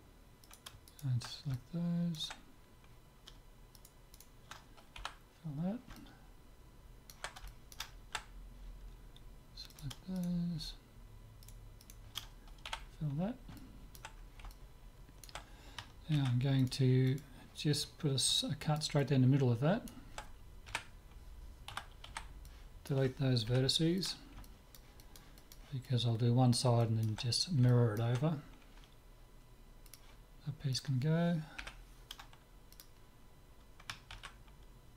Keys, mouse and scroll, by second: 0.5-2.7 right drag, 1.6-2.9 drag, 2.9-4.7 middle drag, 3.8-6.0 right drag, 5.0 f, 5.3-10.3 middle drag, 9.7-13.6 right drag, 12.7 f, 13.6-16.6 middle drag, 16.1 ctrl+r, 18.4-21.2 middle drag, 20.8 KP_7, 21.8 a, 22.3 b, 23.5 Delete, 24.5-29.5 middle drag, 29.9-31.7 drag, 30.7-32.7 right drag, 31.7 Delete, 34.1 ctrl+z.